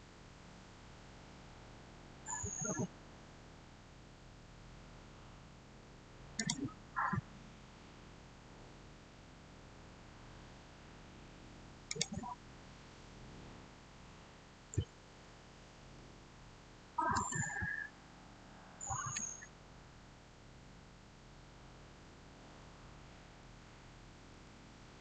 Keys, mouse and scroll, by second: 6.2 click, 7.9 click, 11.7 click, 14.7-15.7 typing, 17.0 Tab, 23.0-23.9 typing, 24.2 Return.